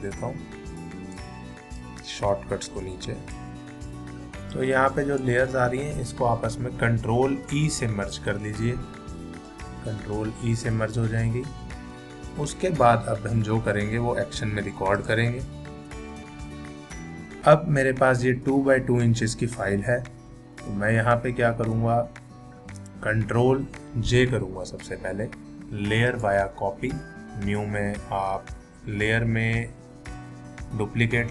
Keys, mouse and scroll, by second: 7.6 ctrl+e, 15.0 click, 28.3 click.